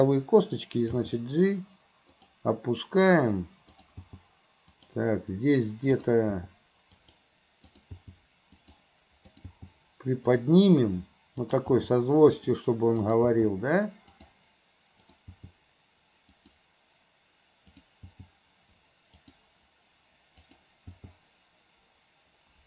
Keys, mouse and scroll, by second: 3.7 click, 6.0 click, 7.7 click, 9.3 click, 11.4 click, 13.0 click, 15.1 click, 17.7 click, 20.4 click.